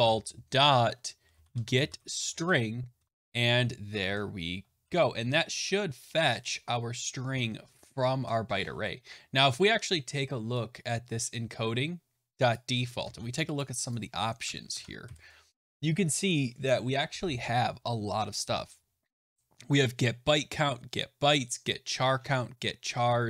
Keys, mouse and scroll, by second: 0.0-2.8 typing, 3.8 BackSpace, 4.0 BackSpace, 5.3 Delete, 5.6 Delete, 5.7 *, 5.7 (, 6.3 Delete, 6.9-7.3 Delete, 7.4 Delete, 7.6 Delete, 8.0 typing, 12.4 click, 12.9 ctrl+c, 13.5 click, 13.8 click, 14.4 Return, 14.7 ctrl+v, 17.8-19.0 scroll down 2, 22.8-23.2 scroll down 1.